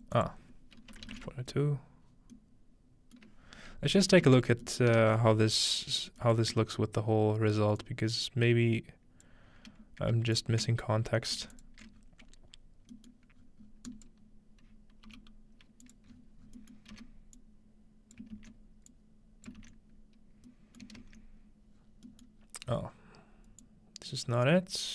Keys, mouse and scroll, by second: 0.2 middle click, 2.3-3.2 middle drag, 3.5-5.6 scroll down 3, 4.3 ctrl+s, 5.0 ctrl+space, 5.2 ctrl+space, 5.6-7.8 scroll up 3, 7.8-9.3 drag, 10.4 ctrl+shift+click, 11.6 alt+shift+click, 12.0-13.9 scroll down 4, 12.4 alt+shift+click, 13.9-15.1 drag, 15.1 g, 15.2 click, 15.2 scroll down 1, 16.0-21.1 drag, 16.1-17.8 scroll up 1, 16.8-17.8 middle drag, 16.9 x, 18.3 ctrl+scroll up 1, 20.8-23.6 ctrl+middle drag, 21.0 ctrl+space, 21.8 scroll down 2, 22.4 scroll down 2, 22.7 scroll up 2, 23.6-24.9 drag.